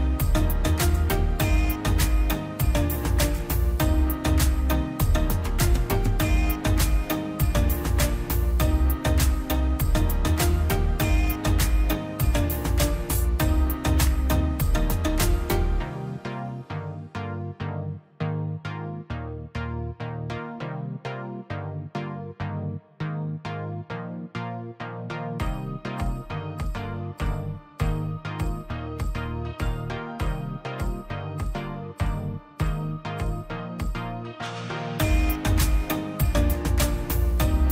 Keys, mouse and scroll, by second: 0.7 click, 0.9 scroll up 1, 1.3 click, 1.7 scroll up 1, 1.9 click, 2.3 ctrl+click, 2.7-3.4 scroll down 2, 2.9 middle click, 3.8 ctrl+click, 4.5 m, 5.7-6.2 scroll up 1, 6.2 click, 7.3 scroll down 1, 8.3 click, 8.4 scroll down 1, 9.1 click, 9.5 scroll down 1, 10.0 click, 10.3 middle click, 10.5 scroll up 1, 11.5 m, 13.2 click, 14.7 click, 14.9 scroll up 1, 15.3 middle click, 15.5 scroll up 1, 15.9 click, 17.6 scroll down 1, 18.2 click, 18.4 scroll down 1, 18.9-20.2 middle drag, 20.2 click, 21.9 scroll down 1, 22.2 middle click, 22.7 scroll down 1, 22.8-24.4 middle drag, 24.4 click, 26.0 middle click, 26.4 click, 26.7 scroll down 1, 27.8-28.9 scroll up 2, 27.8 click, 28.9-32.8 drag, 33.0 scroll up 1, 33.5-34.7 drag, 34.7 scroll down 1, 34.8 middle click, 35.1-35.7 scroll up 1, 35.7 middle click, 36.2-37.7 drag.